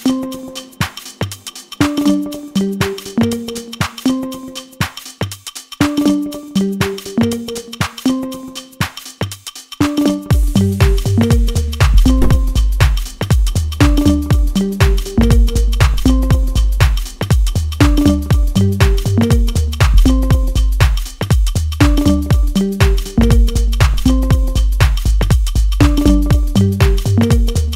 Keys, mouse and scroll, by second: 1.1 Return, 3.3 click, 5.6 click, 5.6 Return, 7.7 click, 9.6 Return, 11.7 click, 14.2 Return, 16.0 click, 18.4 click, 18.8 Return, 21.7 click, 25.1 click, 25.5 Return, 27.4 click.